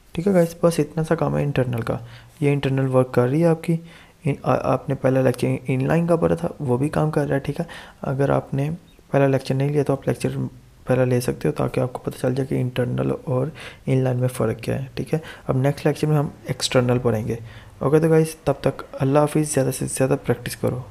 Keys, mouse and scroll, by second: 1.7 click, 8.2 click, 8.3 Tab, 10.3 Right.